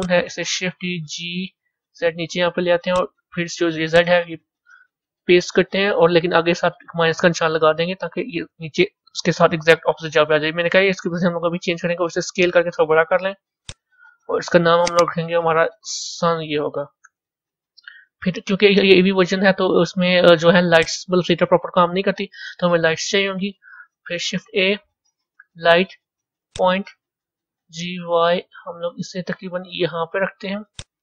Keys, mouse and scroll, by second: 0.6 shift+d, 3.7-6.8 drag, 12.3 s, 14.7 click, 14.9-17.9 drag, 19.9 a, 20.7 click, 23.9 shift+a, 28.6 g.